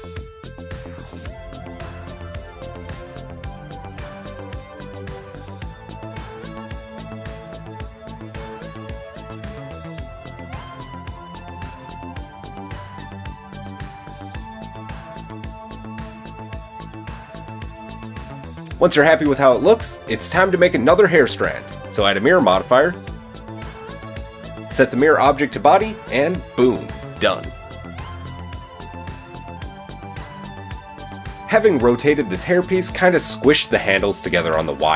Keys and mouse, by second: 0.5 click, 1.7-7.0 drag, 4.0 alt+s, 7.0-11.4 shift+middle drag, 11.4 click, 11.5-12.9 middle drag, 12.3 KP_7, 12.9-13.6 shift+drag, 13.6 shift+middle drag, 13.8 click, 13.9-15.7 shift+middle drag, 14.8 g, 15.8 Tab, 15.8-21.1 middle drag, 21.1 click, 21.1-21.6 middle drag, 21.6-22.8 drag, 23.1-24.7 shift+drag, 24.7-26.4 middle drag, 26.4 click, 26.5-33.7 middle drag, 30.9 KP_3, 33.7 click, 33.9-34.9 middle drag, 34.0 Tab.